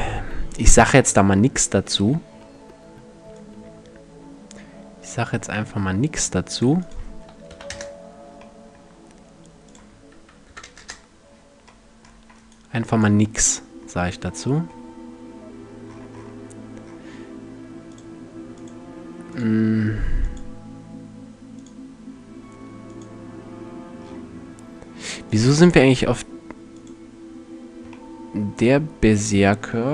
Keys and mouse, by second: 0.6-1.8 middle drag, 3.0-8.2 drag, 10.4 KP_Enter, 13.7-14.4 middle drag, 15.5-17.5 middle drag, 17.5-20.6 drag, 21.2 click, 23.6 middle click, 24.6 middle click, 24.8 click, 24.9-26.8 middle drag, 27.5-28.3 middle drag, 28.5 middle click, 28.8-29.4 middle drag.